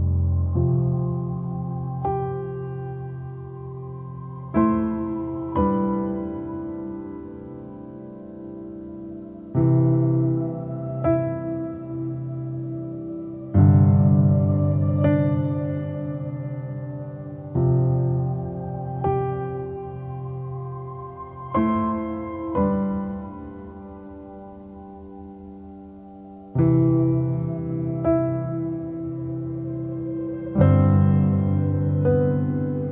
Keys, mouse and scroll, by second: 1.7 f, 3.9 middle click, 4.6 f, 6.6 middle click, 7.5-9.0 scroll down 2, 9.0 click, 9.8-10.6 scroll up 2, 11.2 f, 12.7-13.6 scroll down 2, 13.6 click, 14.5-15.0 scroll up 1, 15.0 scroll down 1, 15.3 middle click, 16.1-17.6 scroll up 1, 17.6-19.2 drag, 19.2 middle click, 19.6-20.2 scroll up 1, 20.2-21.6 middle drag, 21.6 click, 22.5 middle click, 23.4-23.7 scroll up 1, 23.7 middle click, 24.6-25.3 scroll down 1, 25.3-26.3 scroll down 1, 26.3-28.2 drag, 28.2-29.7 middle drag, 29.7-32.8 drag, 32.8 middle click.